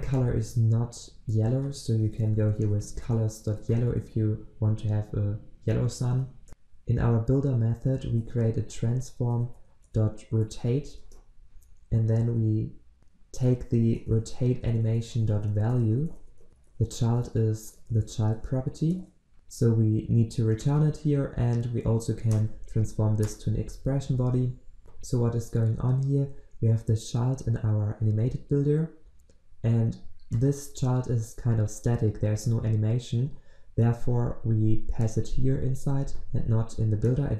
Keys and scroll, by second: 11.0 Return, 19.3 ctrl+z, 22.4 alt+Return, 24.4 ctrl+s.